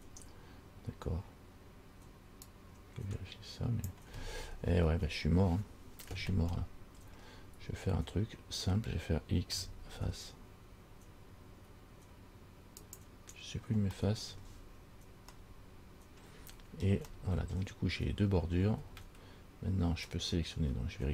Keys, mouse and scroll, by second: 2.6 click, 4.6-5.1 scroll up 6, 5.7 scroll down 3, 6.8 middle click, 8.0-8.4 scroll up 2, 9.7 x, 14.2 middle click, 15.0 scroll down 2, 15.6 middle click, 16.7 scroll up 2, 17.3 shift+middle click, 18.1-18.6 scroll up 2.